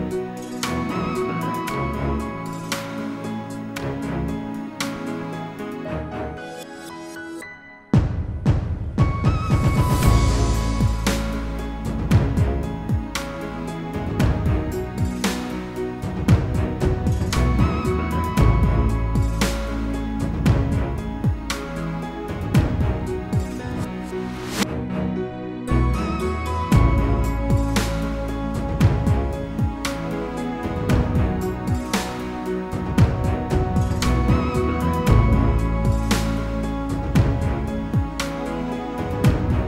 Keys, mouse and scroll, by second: 0.9 click, 1.0 double click, 1.7 click, 2.2-4.7 typing, 5.2 click, 8.6 typing, 9.6 click, 11.0-11.7 scroll up 1, 11.8 click, 14.5-15.2 scroll down 1, 15.3 click, 16.3 click, 17.1 click, 17.7 double click, 18.8 ctrl+a, 19.2-21.5 typing, 21.3 scroll, 22.3 scroll down 1, 22.5 typing, 23.7-30.2 typing, 26.8 Return, 31.3 click, 34.7 F8, 35.1 click, 35.3 double click, 35.6-36.9 typing, 37.1 click, 37.2 double click, 38.3 ctrl+a, 38.6-39.6 typing.